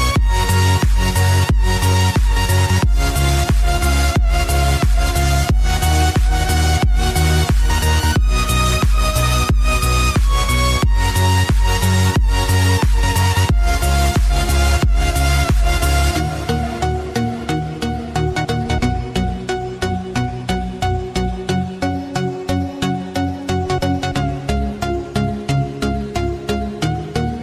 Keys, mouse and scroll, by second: 2.0-2.9 typing, 2.1 scroll down 1, 5.9 typing, 6.0 click, 6.4-6.9 scroll down 1, 6.9-7.8 typing, 7.1 click, 7.9 scroll up 1, 8.5 click, 10.3 [, 10.4 scroll down 1, 10.6 [, 10.7 scroll up 1, 11.1 [, 11.5 scroll up 1, 12.2 scroll up 1, 12.4 [, 12.8 click, 14.9 typing, 15.3 click, 16.3 typing, 16.7 click, 18.2 ], 18.2 click, 18.6 ], 19.9 [, 20.0 scroll down 1, 20.3 scroll up 1, 20.5 [, 20.9 click, 21.3 ], 21.6 click, 21.7 ], 22.7 scroll down 1, 25.7 ctrl+j, 26.2-26.7 scroll up 1, 26.7 space, 27.0 click, 27.2 space.